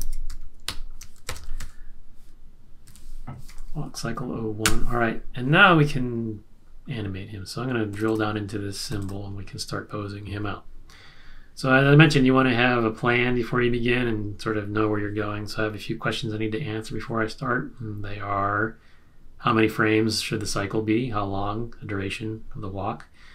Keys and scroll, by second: 0.0-3.7 typing, 4.6 Return.